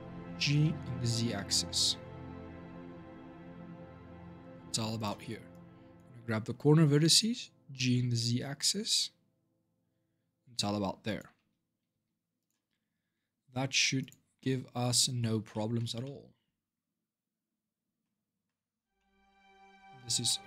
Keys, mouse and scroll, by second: 5.3 click, 7.0 g, 11.7 Tab, 12.2 click, 12.7-13.8 scroll down 1, 13.8-14.2 drag, 14.2-18.3 middle drag, 18.3-18.7 scroll down 4, 18.7-19.3 middle drag, 19.3-20.0 scroll down 3, 19.6 middle drag, 20.0 scroll up 1, 20.0 middle drag, 20.3 scroll down 2.